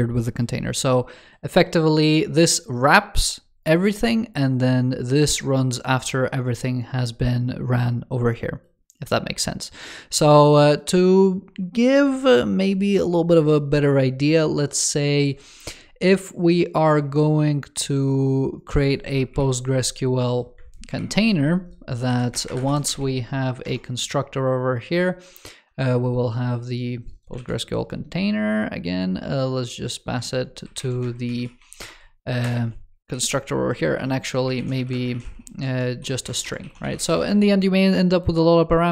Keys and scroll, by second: 19.2 super+/, 20.7 super+/, 27.2 super+c, 30.6 super+v, 33.0 ctrl+s, 35.5 alt+BackSpace, 36.1 alt+BackSpace.